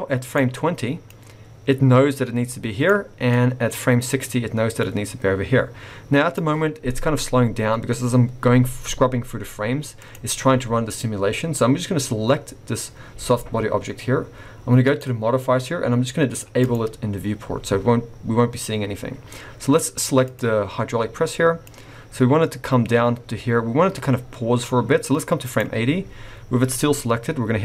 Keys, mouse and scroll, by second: 0.6 click, 1.1 click, 3.3 click, 9.9 click, 14.8 click, 16.6 click, 20.2 click, 21.6 click.